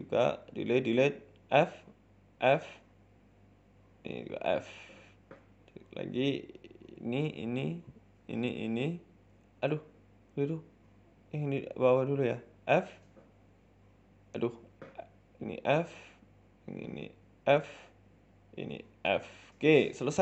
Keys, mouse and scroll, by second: 0.2 shift+right click, 1.3 f, 1.6 right click, 1.9 alt+shift+right click, 2.4 f, 2.4 middle click, 3.0 right click, 3.2 alt+shift+right click, 3.5 a, 3.6 a, 3.9 alt+shift+right click, 4.3 f, 4.4 middle click, 5.2 middle click, 5.4-6.2 scroll down 4, 5.6 middle click, 6.2 middle click, 6.8 right click, 7.1 shift+right click, 7.3 scroll up 3, 7.5 middle click, 8.1 shift+right click, 8.9 f, 9.1-9.4 scroll down 2, 9.4 middle click, 10.3 ctrl+z, 10.5 middle click, 11.0 right click, 11.2 shift+right click, 11.4 shift+middle click, 11.8 middle click, 12.2 shift+right click, 12.8 f, 13.0 middle click, 13.6 right click, 13.9 shift+right click, 14.2 ctrl+z, 14.4 shift+right click, 14.6 shift+middle click, 15.2 shift+right click, 15.8 f, 15.9 middle click, 16.7 right click, 17.0 alt+shift+right click, 17.5 alt+shift+Right, 17.5 f, 17.6 middle click, 18.6 right click, 18.8 alt+shift+right click, 19.2 f, 19.3 scroll down 4, 19.4 Tab, 19.5 middle click.